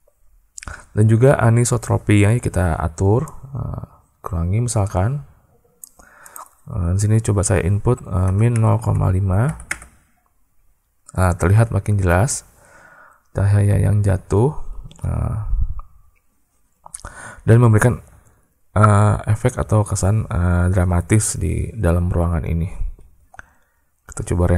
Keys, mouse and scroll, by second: 3.2-5.7 drag, 6.2-10.4 drag.